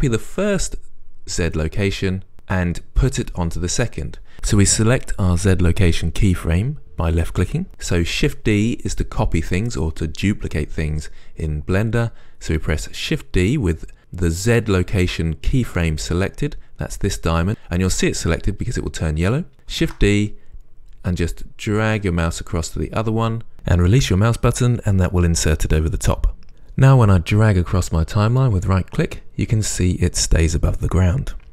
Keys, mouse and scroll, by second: 1.8-2.7 drag, 14.0 click, 20.1 shift+d, 26.5-31.5 right drag.